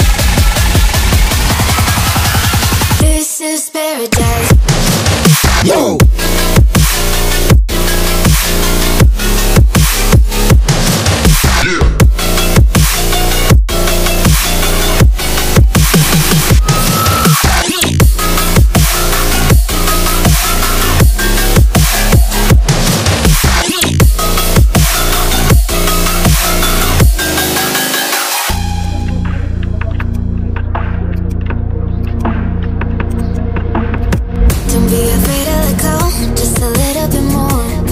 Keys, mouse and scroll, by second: 9.2-11.3 alt+drag, 11.3 BackSpace, 12.2-14.0 drag, 15.7-23.4 drag, 23.4 click, 25.3 click, 28.9 right click, 30.0 click, 30.0 click, 33.2 right click, 34.1 click.